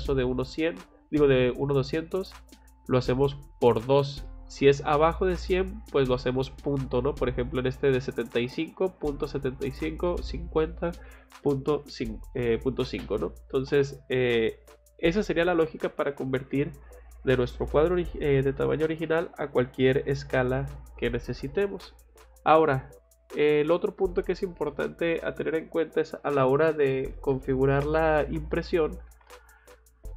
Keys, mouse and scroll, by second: 4.2 middle click, 13.5 middle click, 14.8 scroll down 1, 16.7 scroll up 1, 17.0 click, 17.2 click, 19.0 scroll down 2, 22.2 middle click.